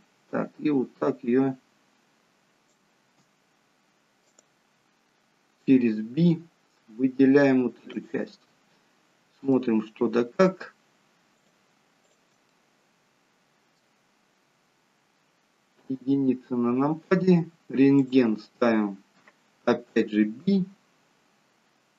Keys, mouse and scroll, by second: 4.6 click, 5.6 b, 9.5 middle click, 11.3 shift+click, 12.0 shift+click, 12.8 middle click, 15.8 KP_1, 18.0 click, 19.9 b.